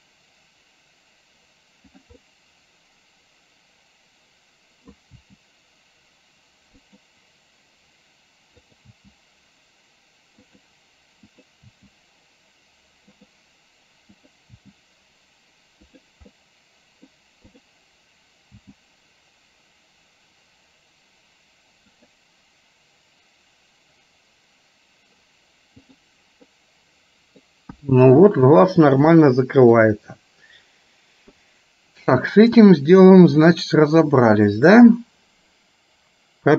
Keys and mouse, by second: 2.3-5.1 middle drag, 5.3 g, 8.8 click, 9.5 g, 11.3 click, 12.0 g, 16.5 middle click, 17.6 click, 18.8 g, 26.7 middle click, 27.8 KP_1, 29.3 middle click, 33.6 click.